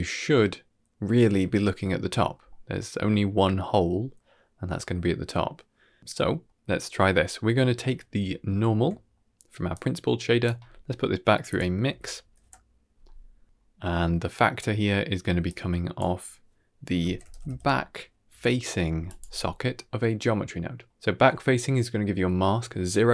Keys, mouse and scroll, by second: 2.4-2.8 middle drag, 4.1-4.6 middle drag, 5.4-5.7 middle drag, 6.0-6.8 middle drag, 7.3 middle click, 7.8 middle click, 8.2 ctrl+middle click, 8.8 middle click, 9.6-13.3 drag, 13.4-13.8 scroll down 2, 13.7 middle click, 15.3-19.1 drag, 23.0 middle click.